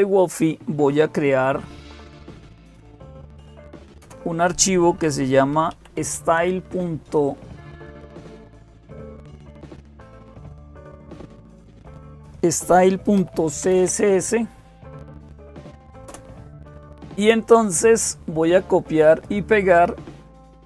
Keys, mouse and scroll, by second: 0.0-20.6 typing, 9.4-10.4 drag, 11.5 click, 15.9 Return, 18.9-20.0 drag, 20.0-20.6 scroll up 1.